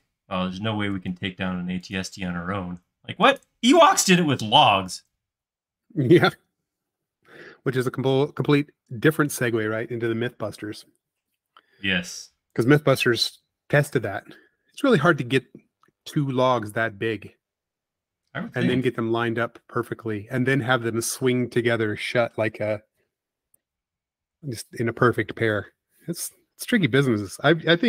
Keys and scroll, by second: 0.4 Left, 6.3 space, 8.9 space, 10.4 m, 16.8 Right, 18.1 Left, 19.3 Up, 21.9 p.